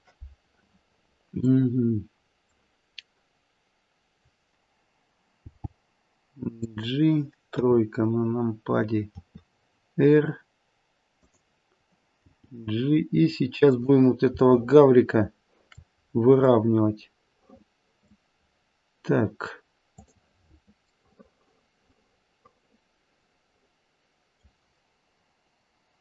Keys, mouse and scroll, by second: 1.0-2.2 scroll down 3, 1.5 middle click, 5.4 g, 7.5 KP_3, 9.2 r, 12.3 g, 14.4 shift+middle click, 16.0-16.5 scroll up 4, 16.5 middle click, 19.9 click, 21.6 middle click, 21.9 middle click.